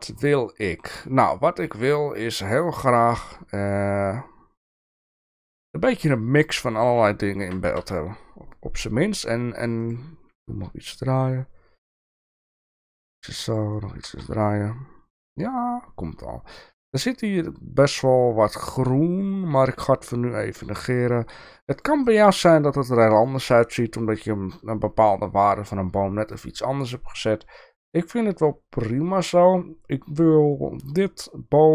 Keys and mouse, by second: 7.4 r, 12.6 g, 13.9 r, 19.6 g.